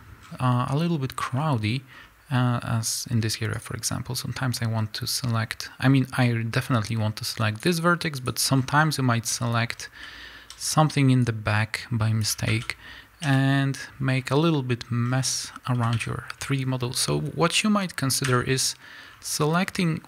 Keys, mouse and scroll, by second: 0.7 scroll up 1, 1.3 click, 3.5 click, 6.2-8.3 drag, 8.5 scroll down 2, 8.8-11.2 middle drag, 9.7-10.0 scroll down 2, 10.0 z, 11.2-15.7 drag, 12.6 z, 13.2 KP_1, 14.1-15.0 scroll up 2, 15.0 scroll down 2, 15.4-15.7 scroll up 2, 15.7 a, 18.2 l, 19.0-19.7 scroll up 2, 19.7-20.0 scroll down 2.